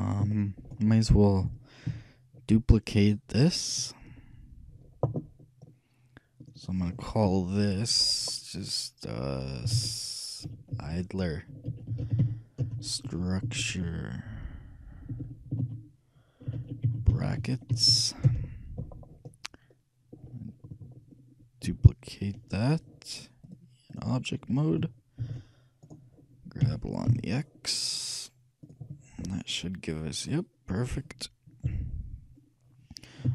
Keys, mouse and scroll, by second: 1.5 KP_3, 1.9 KP_1, 6.5-8.5 drag, 23.5-25.3 shift+drag, 25.3 shift+d, 26.7 g, 29.5-31.0 middle drag, 31.7 KP_3.